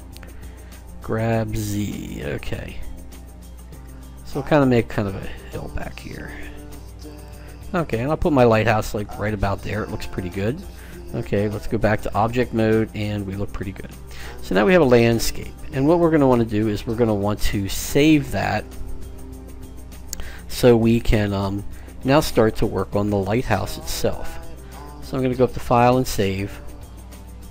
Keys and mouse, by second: 1.0 g, 9.7-11.7 middle drag, 11.7 Tab, 12.4-14.0 middle drag.